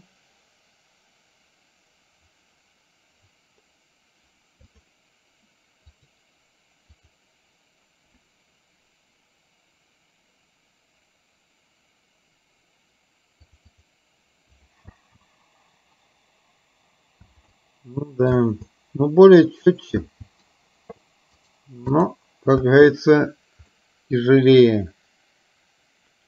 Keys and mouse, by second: 4.8 click, 6.0 click, 7.0 click, 13.6 click, 15.1 space, 17.5 space, 17.6 middle click, 18.5 space, 20.3 space, 21.5 right click, 22.9 space, 24.0-26.2 middle drag.